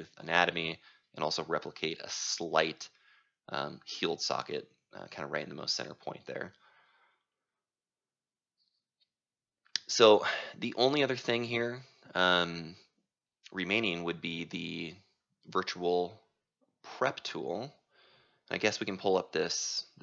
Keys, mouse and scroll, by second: 5.5-16.2 drag, 17.0 click, 17.5 click, 18.4-20.0 drag.